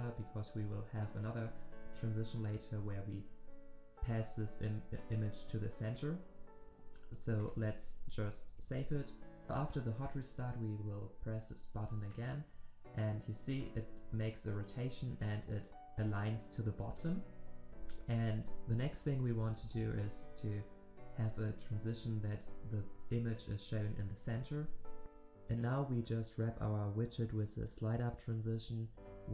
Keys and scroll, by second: 9.1 ctrl+s.